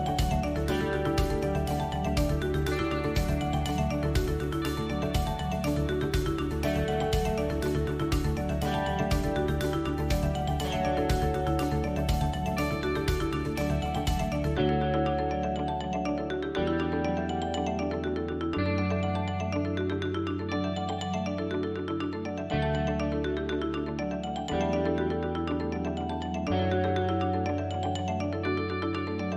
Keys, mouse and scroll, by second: 0.6 KP_3, 3.2 e, 8.3 e, 9.7 middle click, 11.7 click, 12.3 shift+click, 12.6 middle click, 13.9 shift+click, 14.6 shift+click, 15.3 middle click, 17.9 alt+e, 21.9 KP_1, 22.4-23.7 scroll down 3, 23.7 scroll down 1, 27.4 middle click.